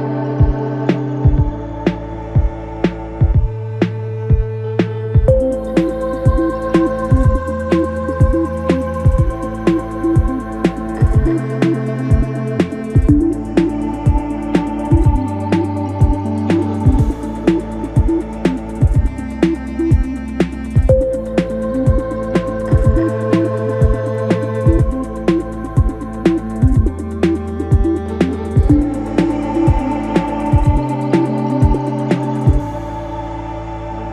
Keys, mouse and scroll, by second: 2.2-6.2 drag, 6.2 ctrl+b, 8.9-12.1 middle drag, 12.7 click, 13.1-14.7 right drag, 14.7 KP_1, 15.3 Tab, 18.2 g, 24.9-25.8 scroll down 1, 25.8 shift+d, 28.0 r, 30.3 g.